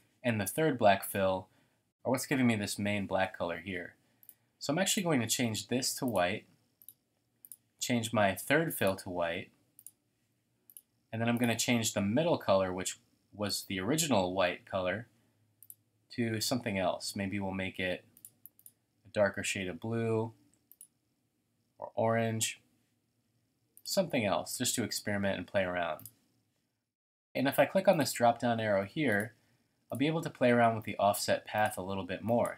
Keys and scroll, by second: 17.0 typing.